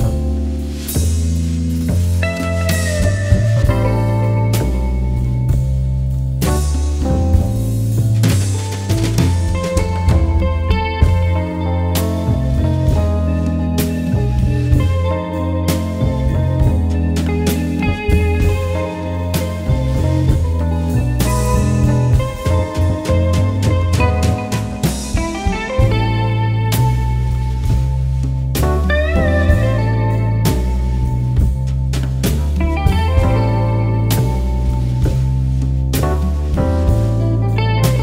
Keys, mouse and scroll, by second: 0.1 click, 0.6 click, 1.0 right click, 1.1 click, 2.5 alt+scroll down 1, 2.6 click, 2.6 space, 2.8-5.1 drag, 5.1 alt+shift+click, 5.7 alt+click, 6.6 alt+scroll down 1, 6.8 click, 7.5 click, 7.6 alt+scroll down 1, 8.2 alt+scroll down 1, 8.3 alt+click, 9.1 alt+scroll up 1, 9.3 alt+scroll down 1, 9.7 click, 10.3 alt+scroll up 1, 10.4 click, 10.7 alt+scroll down 1.